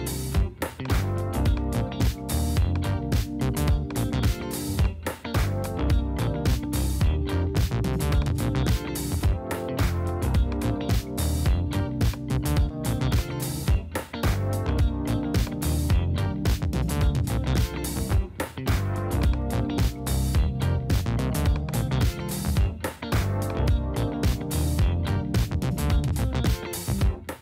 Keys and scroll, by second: 15.7 space, 17.8 space, 23.6 space, 26.9 space.